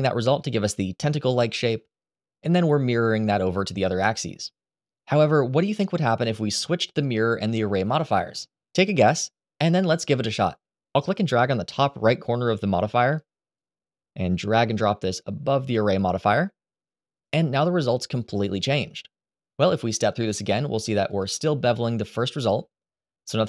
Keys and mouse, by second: 2.8 click, 13.4-15.9 drag, 19.9 click, 20.8 click, 21.5 click, 22.1 click.